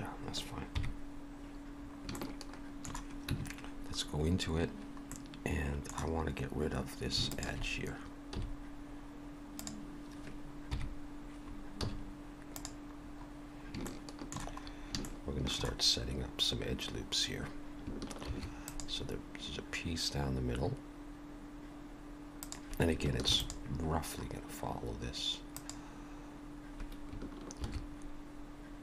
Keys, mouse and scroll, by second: 0.7 KP_3, 1.8 scroll up 3, 2.2 shift+middle click, 3.3 Tab, 5.1 middle click, 7.3 alt+shift+click, 8.4 x, 10.7 KP_3, 11.8 z, 13.0-13.7 scroll up 2, 13.9 shift+middle click, 14.7 scroll up 1, 15.1 shift+middle click, 23.2 ctrl+r, 27.6 ctrl+r.